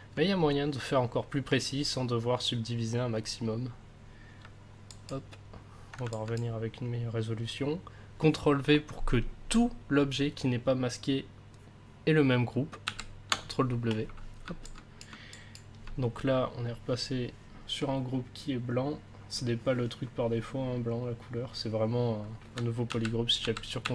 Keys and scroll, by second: 12.8 ctrl+w, 22.9 ctrl+w.